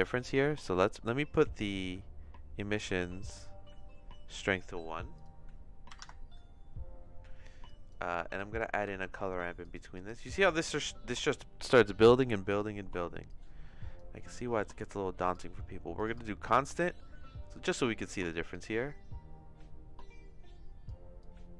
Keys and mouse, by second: 4.2 click, 5.1-6.7 drag, 7.8 click, 8.3 click, 8.9 shift+a, 13.3 click, 15.3 click, 18.5-20.8 drag, 21.2 click.